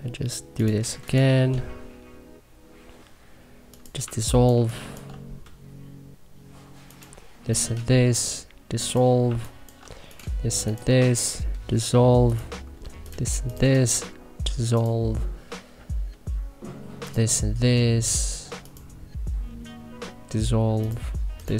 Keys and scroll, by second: 3.9 1, 4.4 3, 9.2 1.